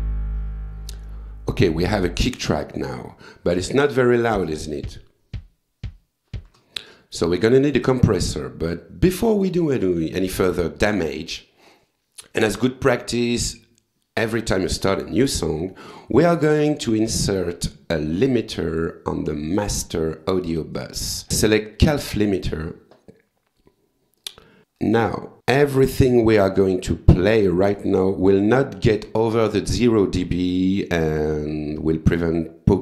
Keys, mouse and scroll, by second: 4.3 space, 6.4 space, 8.7 click, 17.9 click, 18.3 right click, 19.6 click, 21.8 click, 24.2 click, 24.7 click, 24.8 right click, 25.4 click, 32.1 click.